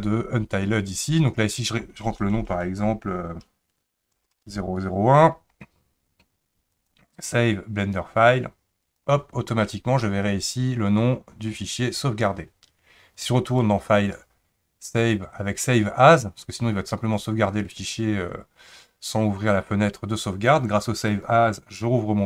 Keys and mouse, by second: 13.5-21.3 drag.